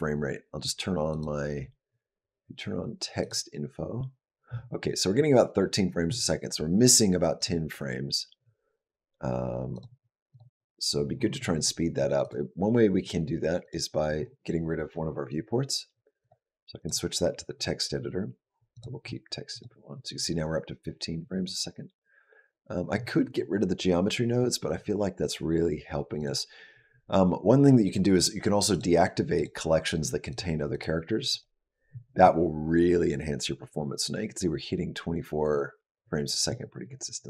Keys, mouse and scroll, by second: 1.0 click, 7.3 click, 10.2 click, 12.1 click, 16.1 click, 16.7 click, 19.4 click, 24.2-26.1 scroll down 6, 26.1 click, 28.7 click, 29.2 click, 30.2 click, 30.6 click, 31.1 click.